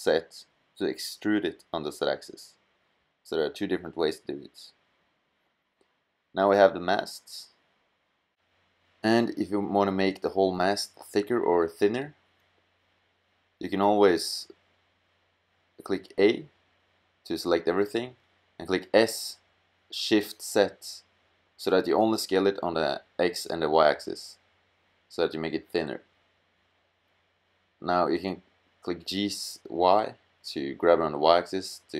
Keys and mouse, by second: 3.0 middle click, 6.2 middle click, 6.4 middle click, 9.3 middle click, 9.8-11.4 middle drag, 11.4 g, 15.8 a, 16.3 a, 17.6 s, 26.7 g, 31.0 middle click, 31.3 middle click.